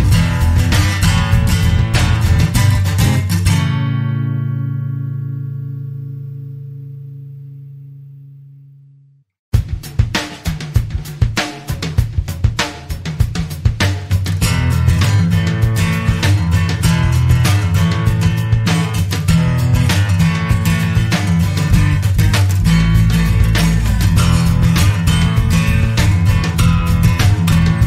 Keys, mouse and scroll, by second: 1.6 click, 3.2 click, 4.5 click, 5.9 7, 6.6 Right, 7.9-9.7 typing, 10.1 click, 11.2 click, 12.3 click, 16.1-18.8 drag, 20.0 click, 21.7-23.8 drag, 24.2 click, 26.2 click, 26.6 click, 27.5 click.